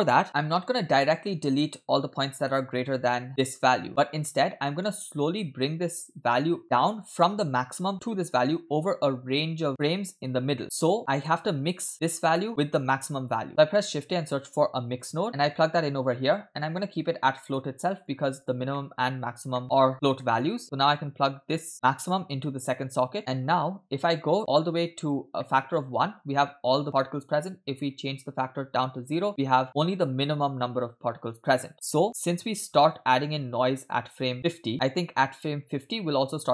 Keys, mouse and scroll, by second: 0.5 middle click, 1.5 click, 2.5 middle click, 3.9 click, 6.0-7.0 drag, 7.2 middle click, 7.9 click, 9.8-11.0 drag, 11.0 scroll down 2, 11.1 middle click, 12.0 click, 12.3 middle click, 12.8 click, 13.5 middle click, 13.6 shift+a, 16.4 click, 16.8 scroll up 2, 17.4 middle click, 17.6-18.0 scroll up 2, 18.0 click, 18.4 click, 18.8 middle click, 19.6 middle click, 19.6 click, 19.9 scroll down 3, 20.2 middle click, 21.5 click, 22.1-23.2 drag, 24.1-25.2 drag, 25.4 middle click, 25.6-26.1 scroll up 2, 28.2-29.2 drag, 33.0-35.1 drag.